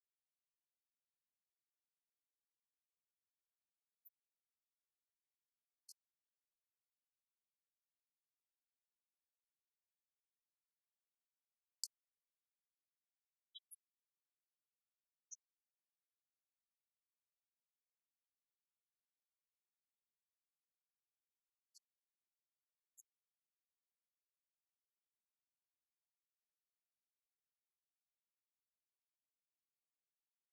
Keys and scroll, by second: 11.0 alt+d.